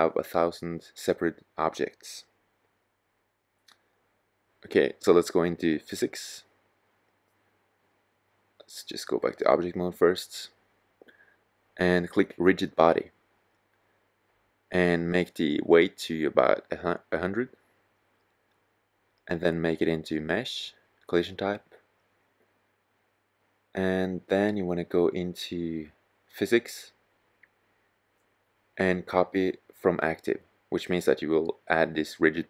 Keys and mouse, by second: 5.5-7.4 drag, 8.1-9.1 drag, 9.2 click, 16.2 KP_0.